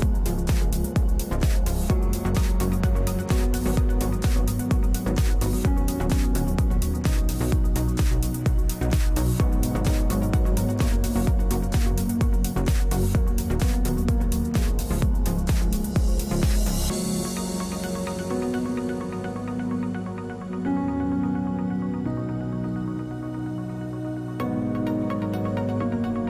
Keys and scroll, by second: 9.2 space, 10.4 space, 14.7 space, 16.1 space, 25.7 Delete.